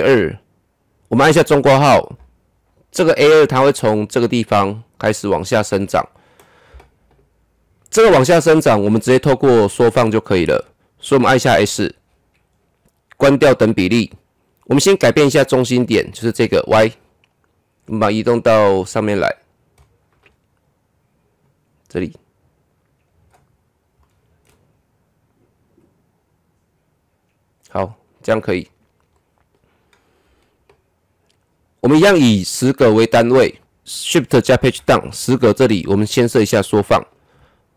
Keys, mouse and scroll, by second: 1.3 [, 11.4 s, 13.4 click, 16.1 click, 17.8-19.4 drag, 19.4-19.8 scroll up 1, 19.8 middle click, 20.5-21.4 scroll up 1, 21.4-23.5 drag, 23.5-24.0 scroll up 1, 24.0-25.7 middle drag, 25.7-28.5 drag, 28.5-29.1 scroll down 1, 29.1 middle click, 29.8-31.6 scroll down 1, 33.6-34.6 scroll down 1, 34.6 shift+Page_Down, 36.6 click.